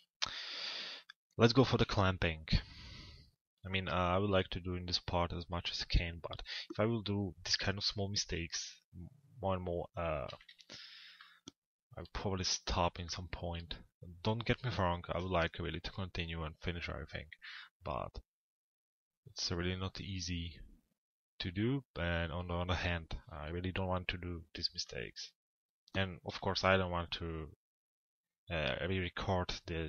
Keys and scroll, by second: 10.0 t, 10.4 z.